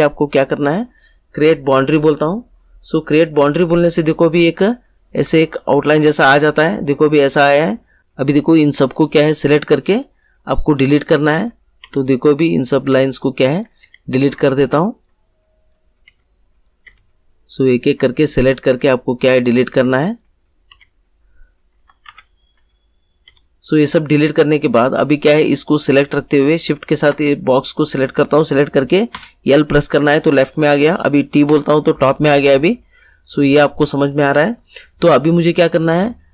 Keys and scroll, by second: 9.8 Delete, 11.8 Delete, 16.0 Delete, 19.1 Delete, 20.6 Delete, 22.0 ctrl+z, 23.2 Delete, 29.0 l, 31.4 t.